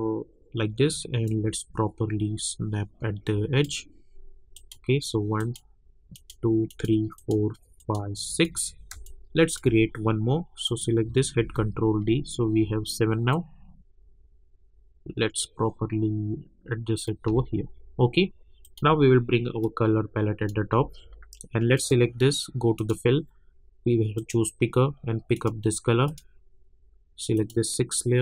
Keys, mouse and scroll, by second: 1.2-4.5 drag, 8.9 space, 9.0 click, 9.4 space, 10.6 click, 11.4 ctrl+d, 12.2-12.6 alt+scroll up 1, 13.3-17.3 drag, 17.3 alt+scroll down 1, 18.6-21.7 drag, 24.1 click.